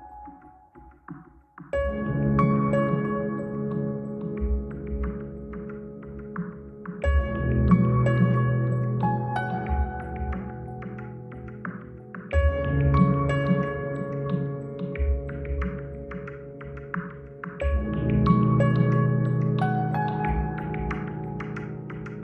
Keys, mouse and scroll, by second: 0.2 click, 1.2 F9, 6.9 F9, 7.1 F9, 10.1 scroll up 2, 10.5-11.7 middle drag, 12.6-13.9 scroll down 2, 12.8 Tab, 13.9-14.2 scroll up 2, 14.2 ctrl+middle click, 15.8 ctrl+alt+p, 17.8-18.1 scroll up 2, 18.1 scroll down 2, 18.3-18.9 scroll up 2, 18.9 scroll down 2, 19.1 scroll up 2, 19.5-22.1 shift+middle drag.